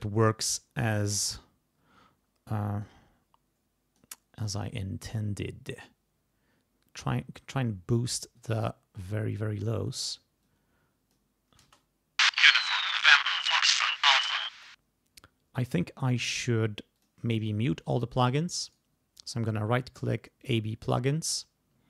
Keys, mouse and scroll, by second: 2.8-4.2 drag, 5.8-7.3 drag, 7.8-8.3 scroll up 2, 8.3-9.2 scroll down 2, 9.6-10.3 scroll up 4, 10.4 click, 11.6 space, 14.5 space, 15.6 middle click, 17.0 click, 18.7 right click, 20.5 click.